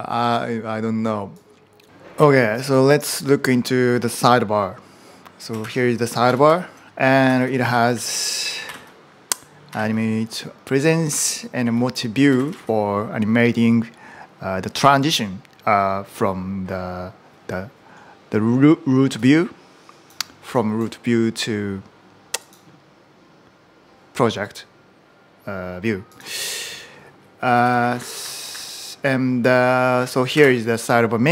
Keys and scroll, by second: 1.6-2.4 typing, 5.4 shift+g, 6.1 ctrl+u, 6.3 ctrl+u, 6.7-12.8 typing, 27.1-30.7 typing.